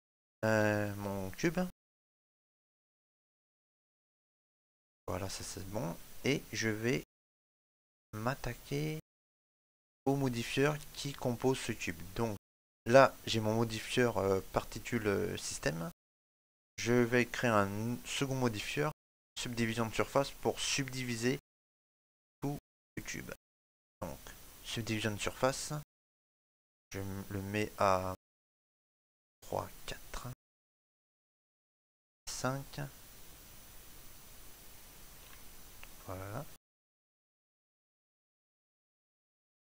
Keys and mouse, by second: 0.0 click, 0.1 ctrl+middle click, 0.5 shift+middle click, 0.8 middle click, 2.0 shift+middle click, 3.1 KP_Decimal, 3.6 middle click, 8.1 click, 10.1 click, 10.8 shift+middle click, 11.2 middle click, 13.3 click, 30.5 ctrl+middle click, 32.2 click, 34.7 shift+middle click, 35.3 ctrl+middle click, 38.1 click.